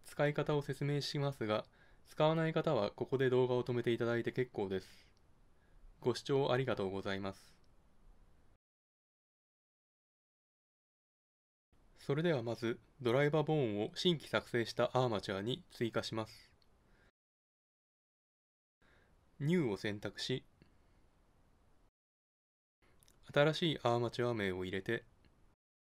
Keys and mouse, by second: 19.4-24.3 drag, 24.4 Left, 25.6 BackSpace, 25.7 BackSpace.